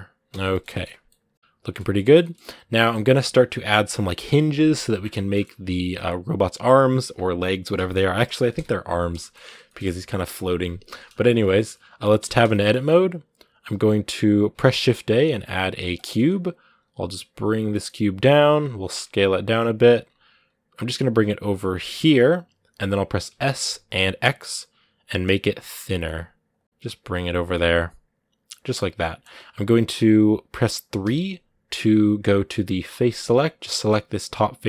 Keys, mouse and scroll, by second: 0.3 shift+middle click, 0.8 scroll down 2, 0.9 middle click, 1.7 scroll down 1, 1.8 shift+middle click, 2.2-2.6 scroll up 1, 2.6-4.7 middle drag, 4.7-5.1 scroll down 2, 5.1-8.3 shift+middle drag, 8.3 KP_1, 9.0 shift+middle click, 9.2 scroll up 2, 9.5-10.8 shift+middle drag, 10.8 scroll up 1, 11.3 shift+middle click, 12.0 Tab, 12.3-13.5 shift+middle drag, 13.5 a, 13.7 scroll down 1, 15.8 shift+a, 16.0 scroll down 1, 16.6 g, 18.3 scroll up 1, 18.7 s, 19.8-20.2 scroll up 2, 20.2 g, 22.0 scroll up 2, 23.1 s, 27.3 scroll up 1, 27.3-29.4 middle drag, 29.4-30.8 scroll up 1, 30.8 3, 32.9 right click, 33.9-34.6 middle drag.